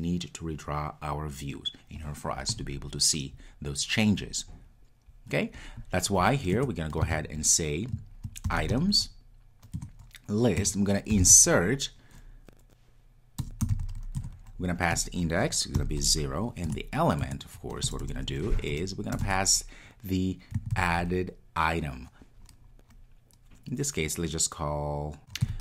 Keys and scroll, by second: 9.8 Return, 14.2 Return, 17.2 Return, 17.6 Tab.